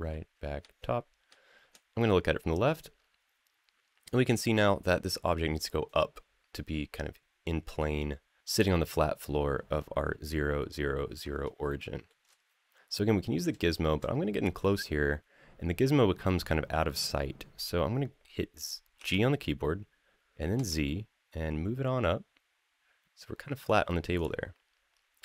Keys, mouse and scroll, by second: 0.0-1.1 typing, 4.8 click, 6.3 scroll up 2, 11.5-11.9 shift+middle drag, 13.4 shift+middle drag, 13.9-15.5 scroll up 1, 18.8 g, 20.3 z, 23.4 click, 23.9 click, 25.1-25.2 middle drag.